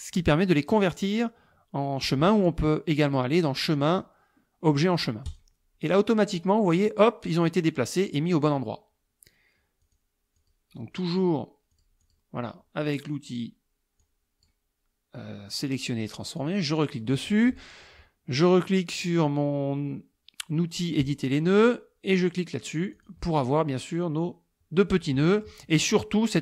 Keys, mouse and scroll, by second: 3.6 click, 5.3 click, 9.9 click, 10.4 click, 11.8-12.3 drag, 14.1 click, 16.4 click, 21.1 click, 23.0 click, 25.1 click.